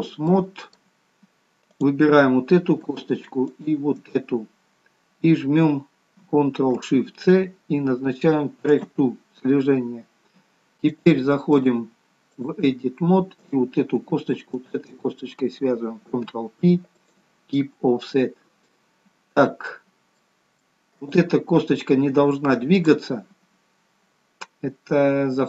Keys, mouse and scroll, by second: 0.4 middle click, 1.0-1.7 scroll down 1, 1.7 click, 4.0 shift+click, 7.4 ctrl+shift+c, 11.0 click, 14.6 shift+click, 16.3 ctrl+p, 18.2-18.6 scroll up 1, 18.6 middle click, 19.7-20.2 scroll up 2, 20.2 middle click, 21.0 click, 23.2 click.